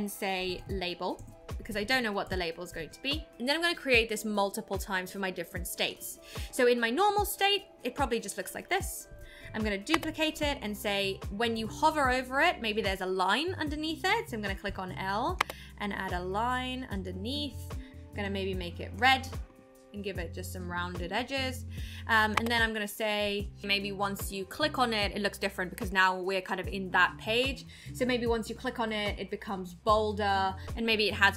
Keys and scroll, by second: 9.9 super+d, 15.4 l.